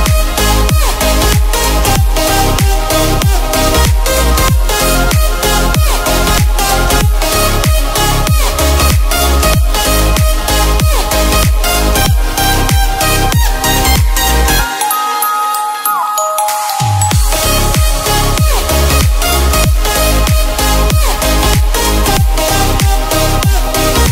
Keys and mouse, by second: 14.9-15.6 drag, 15.8 click, 16.1-22.0 drag.